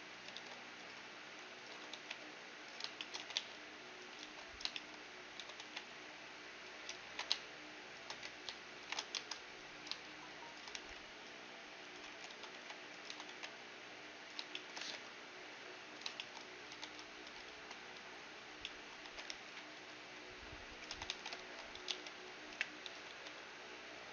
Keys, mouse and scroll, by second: 0.0-2.0 typing, 3.0-6.7 middle drag, 3.2 e, 4.2 right click, 4.2 ctrl+z, 4.2-6.4 drag, 5.7 a, 5.7 b, 7.1 ctrl+b, 8.8 ctrl+shift+b, 10.8 t, 11.9-14.1 drag, 12.2-13.3 typing, 14.5-18.4 middle drag, 14.9 g, 16.8 a, 17.0 a, 17.5 f, 18.0 z, 18.7-20.5 middle drag, 19.0 e, 20.9-23.1 typing, 21.4 ctrl+n.